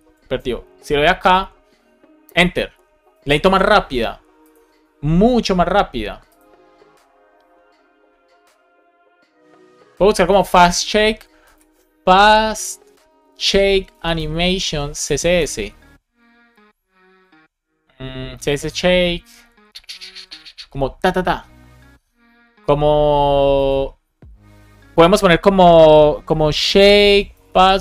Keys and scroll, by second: 2.1 Return, 12.5 BackSpace, 12.7 space, 14.6 space, 15.3 Return, 26.9 space.